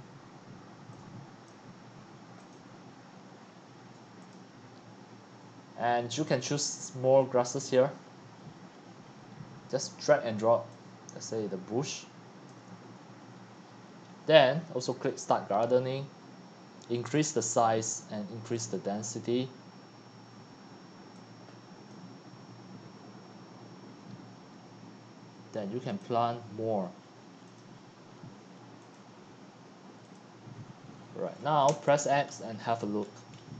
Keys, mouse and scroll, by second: 13.0 click, 13.6-15.2 middle drag, 13.6-14.7 scroll up 10, 14.7-15.2 scroll up 1, 15.2-31.7 drag, 31.7 x, 32.3-32.7 scroll up 2, 32.3-33.4 drag.